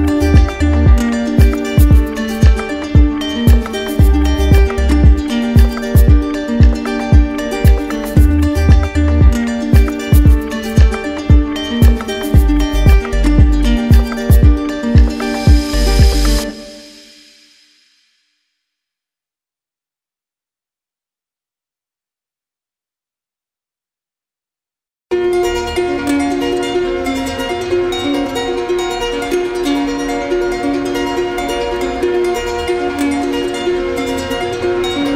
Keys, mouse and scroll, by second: 1.1 ctrl+click, 1.7 ctrl+click, 3.6 click, 4.3 ctrl+click, 6.2 ctrl+click, 6.7 ctrl+click, 8.6 click, 9.2 ctrl+click, 11.0 ctrl+click, 11.5 ctrl+click, 18.0 click, 18.7 ctrl+click, 19.8 click, 20.3 alt+click, 21.1 click, 21.7 alt+click, 23.2 click, 23.7 shift+click, 29.2 shift+click, 30.0 click, 30.3 q, 31.7 alt+click, 33.5 click, 34.8 alt+click.